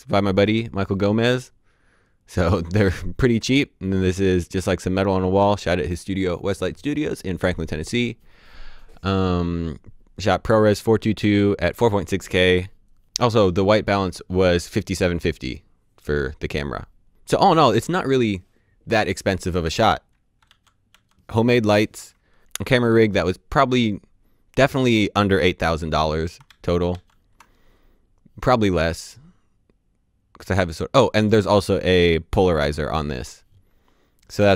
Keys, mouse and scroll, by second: 20.4 d, 20.8 d, 26.4 d, 26.8 d.